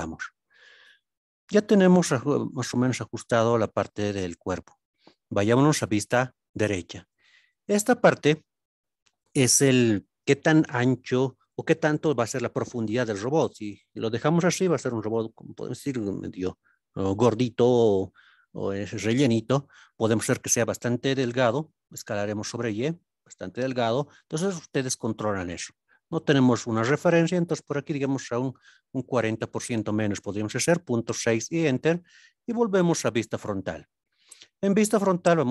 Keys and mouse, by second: 5.8 KP_3, 7.5-8.1 drag, 22.1 y, 28.5 KP_Decimal, 28.5 KP_6, 32.5 KP_1, 35.1 click.